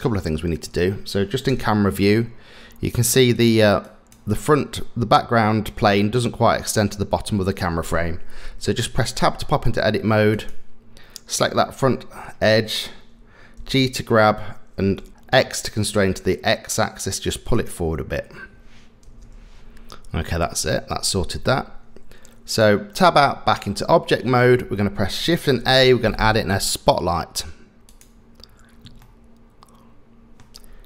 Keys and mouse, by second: 0.2 middle click, 1.5 KP_0, 3.0 click, 3.3 click, 3.9 click, 9.2 Tab, 10.3 click, 11.5 middle click, 13.6 g, 19.1 KP_0, 21.5 Tab, 25.6 shift+a, 29.0-30.4 middle drag.